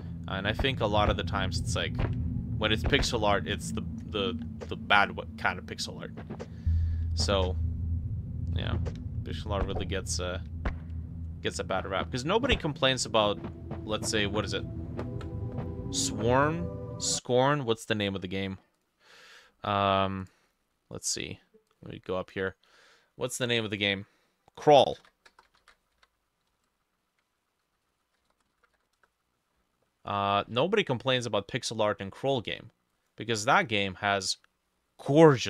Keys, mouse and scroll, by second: 24.6-26.6 typing, 25.0-31.0 drag, 27.3 ctrl+middle click, 27.3 ctrl+a, 27.6-29.3 typing.